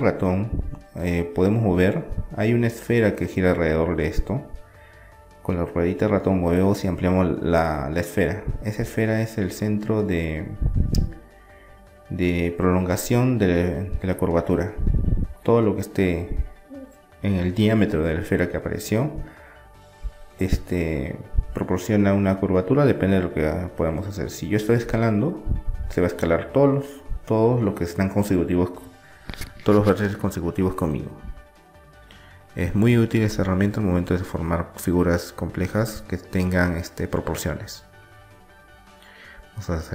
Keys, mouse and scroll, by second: 8.9-10.8 middle drag, 12.5-15.2 middle drag, 14.4 Tab, 15.2-16.9 drag, 16.9-20.5 middle drag, 20.9-23.8 middle drag, 26.9 KP_3, 27.5-29.5 middle drag, 28.9 s, 35.2 s, 37.9 s.